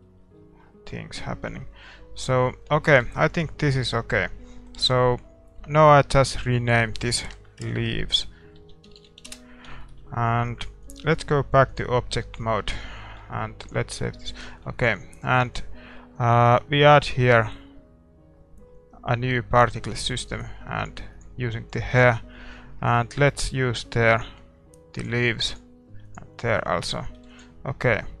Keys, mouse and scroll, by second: 11.8 click, 12.1-14.2 middle drag, 14.0 ctrl+s, 20.1-28.2 drag, 26.5-28.2 middle drag.